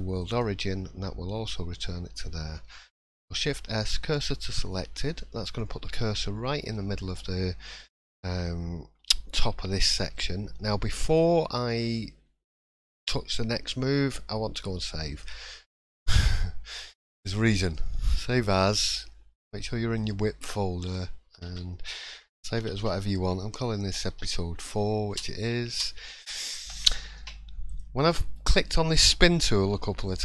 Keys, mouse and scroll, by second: 2.8 shift+s, 4.6 middle click, 6.7-7.3 scroll up 1, 7.8 shift+middle click, 9.0 2, 9.7 shift+middle click, 15.1 click, 27.7 click.